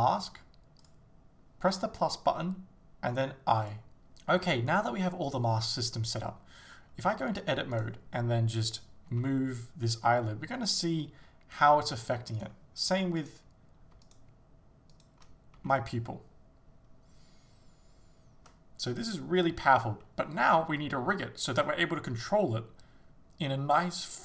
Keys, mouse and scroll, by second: 3.7 click, 4.3 shift+middle click, 7.2 Tab, 7.8 right click, 9.2 g, 12.4 right click, 13.3 right click, 14.1 shift+right click, 15.0 shift+right click, 15.6 g, 21.6 right click.